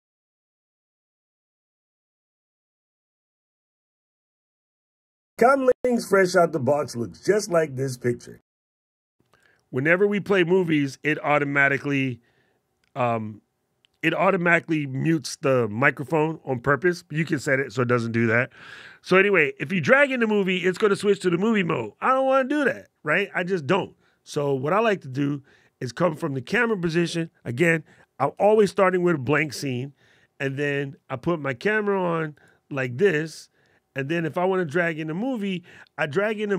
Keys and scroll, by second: 28.4 shift+super+b.